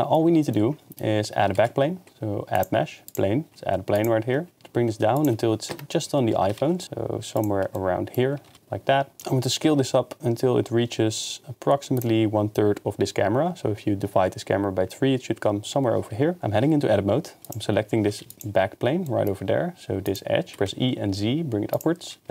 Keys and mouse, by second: 1.6 shift+a, 3.5 s, 4.6 g, 4.6 z, 5.7 KP_0, 6.4 g, 6.6 z, 7.4 shift+middle drag, 7.7 middle drag, 8.5-9.2 typing, 12.0 click, 18.1 2, 18.3 click, 20.5 e, 20.7 z, 21.7 click, 22.2 2.